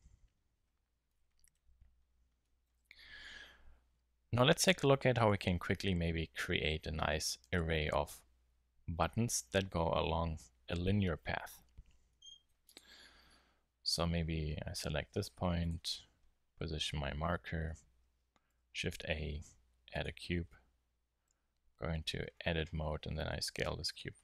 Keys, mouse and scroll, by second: 1.1 middle drag, 1.3 middle click, 1.5-2.2 middle drag, 13.0 Tab, 15.0 shift+s, 16.6 Tab, 18.5 shift+a, 20.9 Tab, 22.0 middle click, 22.9 middle click, 23.2 s.